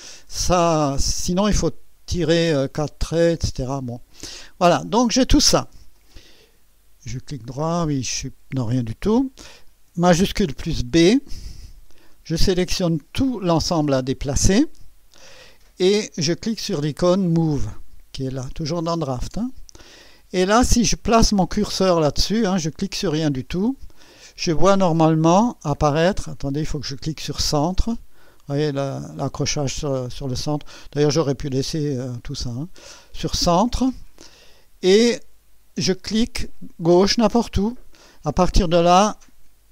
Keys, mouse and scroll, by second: 0.2-0.9 right drag, 7.1 right click, 7.9 click, 11.1 shift+b, 12.1-13.2 drag, 19.0 click, 26.2 click, 31.3 click, 31.9 click, 37.7 click.